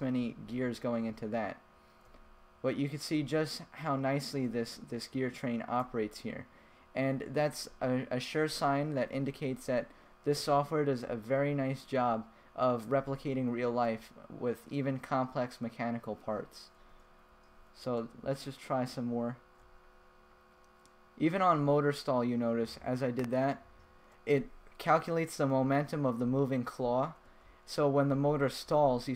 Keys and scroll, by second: 0.3 Down, 1.0 Up, 1.6 Left, 2.6 Right, 3.7 Left, 5.0 Right, 6.3 Left, 9.3 Left, 10.0 Left, 11.0 Left, 12.4 Right, 13.6 Left, 14.4 Right, 17.7 Up, 18.2 Down, 19.4 Right, 20.1 Left, 22.0 Right, 23.2 Left, 26.2 Right, 27.3 Right, 27.7 Left.